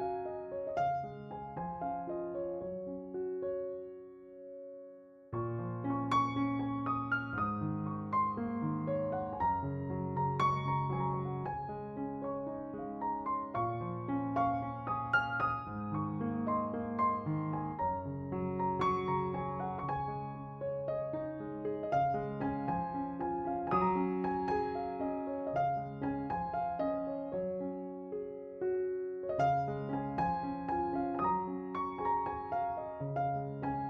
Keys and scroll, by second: 3.4 s, 6.5 s, 8.3 s, 17.6 s, 25.4 s, 33.2 s.